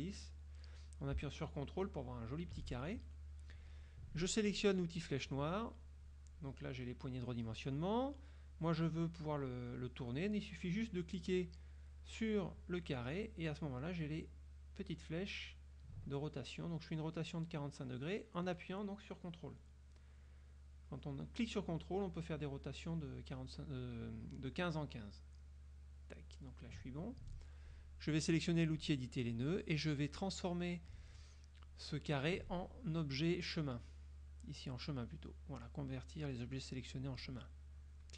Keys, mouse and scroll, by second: 5.1 click, 11.1 click, 14.1-26.9 drag, 28.9 click, 37.9 click.